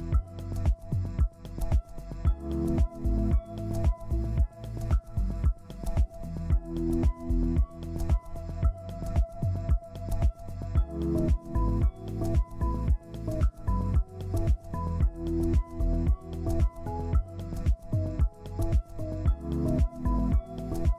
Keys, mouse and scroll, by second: 6.7 scroll up 1, 10.2 scroll down 1, 13.9 ctrl+space, 15.6 ctrl+Page_Up, 17.1 ctrl+Page_Down, 18.8 scroll down 1, 19.1 z, 20.3 ctrl+space, 20.7-20.9 ctrl+scroll down 1.